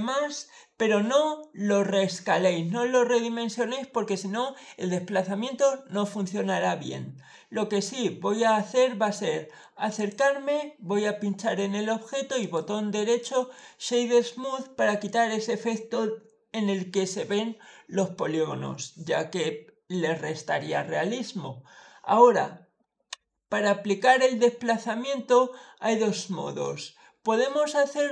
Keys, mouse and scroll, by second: 0.1 scroll up 1, 0.2 middle click, 7.6-8.6 scroll up 1, 8.6-9.0 scroll down 1, 9.1 middle click, 9.8 click, 12.2 right click, 13.0 click, 14.4-15.1 scroll down 4, 23.5-24.3 scroll down 3, 23.7 middle click.